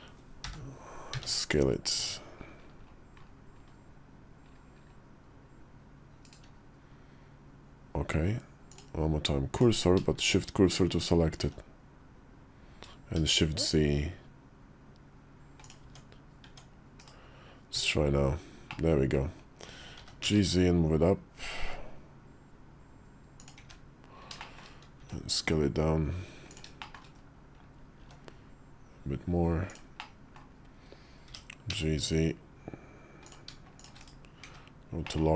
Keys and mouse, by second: 0.3 o, 1.0 s, 8.5 click, 10.1 shift+s, 11.3 s, 15.7 Tab, 16.3 Tab, 16.9 /, 17.6 `, 18.5 middle click, 19.8 g, 24.2 shift+`, 24.3 middle click, 24.8 s, 26.8 middle click, 27.0 KP_5, 27.9 s, 29.9 middle click, 31.1 g, 34.1 /, 34.3 `, 34.9 middle click.